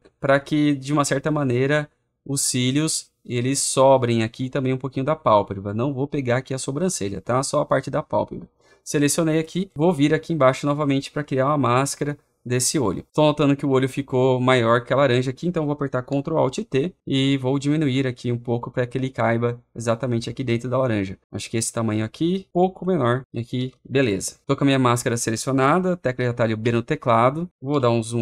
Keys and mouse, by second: 9.0-16.4 drag, 16.4 ctrl+alt+t, 18.5-21.6 drag, 23.2 alt+click, 23.5 Return, 26.5 b, 27.6 ctrl++.